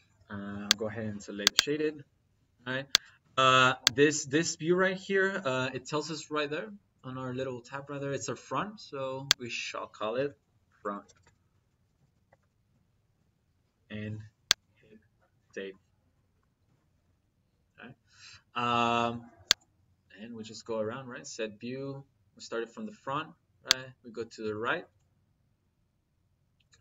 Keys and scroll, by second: 10.5-12.4 typing, 11.7 Left.